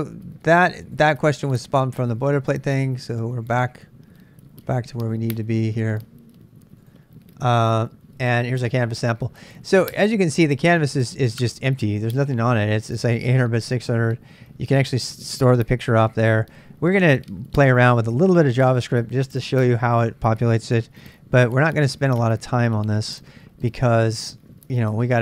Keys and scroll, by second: 21.1 super+Tab.